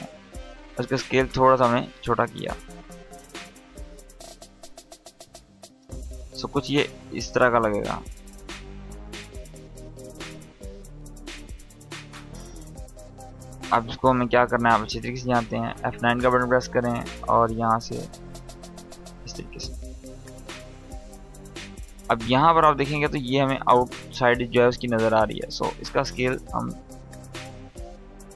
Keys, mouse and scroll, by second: 3.4-5.3 shift+drag, 7.8 space, 9.9-10.5 click, 10.3 space, 11.1 click, 11.4 space, 13.4-14.5 drag, 15.2 F9, 16.0-17.1 drag, 19.3 space, 21.2-22.6 drag, 25.1-26.6 drag, 27.0 ctrl+z, 27.5 click.